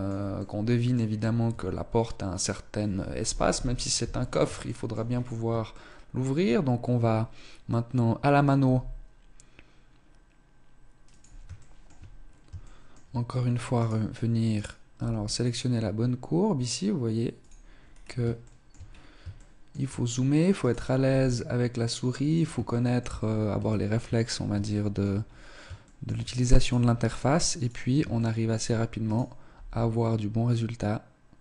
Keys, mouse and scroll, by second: 1.1 scroll up 2, 1.4 Tab, 3.4 KP_1, 4.5 shift+middle click, 5.0-5.4 scroll up 3, 5.7 shift+middle click, 7.1-7.7 scroll up 1, 7.7 scroll up 1, 8.5 g, 11.7 shift+middle click, 12.1-12.5 scroll down 3, 12.5 shift+middle click, 13.7 right click, 14.6 right click, 14.9 g, 17.3 click, 17.7 scroll down 4, 18.4 shift+middle click, 18.5-19.1 scroll up 5, 19.3 shift+middle click, 20.5 right click, 20.9 g, 22.6 shift+middle click, 23.2 scroll down 1, 23.6 shift+middle click, 23.9-24.2 scroll down 4, 24.6 shift+middle click, 25.1-25.5 scroll up 4, 25.7 shift+middle click, 26.5 right click, 26.7 g, 27.8-29.4 typing, 28.1 shift+middle click, 28.9 right click.